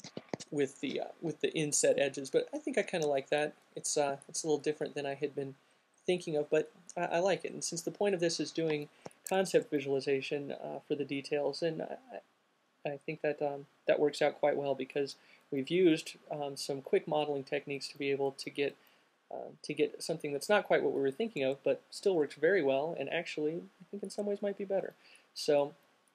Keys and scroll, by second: 0.2 q.